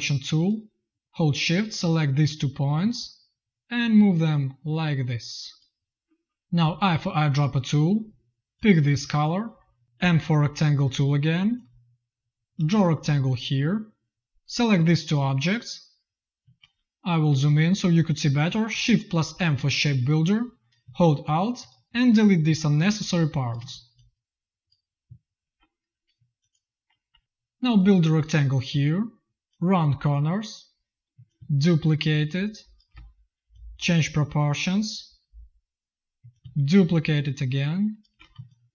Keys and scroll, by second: 6.5 i, 9.9 m, 16.3 z, 19.2 shift+m, 22.4 z, 23.1 space, 23.5 z, 25.3 shift+m, 27.0 v, 29.3 v, 31.0 v, 38.2 z.